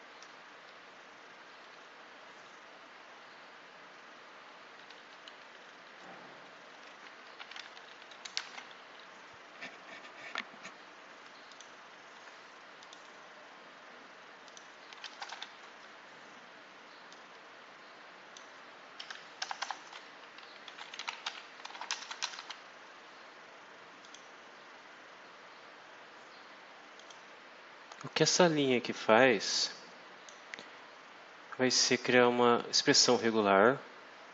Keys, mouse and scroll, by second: 1.1 Down, 2.3 Left, 4.4 Up, 4.7 Left, 6.5 Left, 7.3 shift+-, 7.5 shift+Down, 8.1 shift+Left, 8.4 shift+-, 8.7 shift+Up, 11.4 click, 12.7 click, 14.4 click, 15.1 BackSpace, 15.2 f, 17.0-18.5 drag, 19.3-22.8 typing, 23.9 click, 26.9 click, 29.2-30.4 drag, 31.9 click, 32.8 click.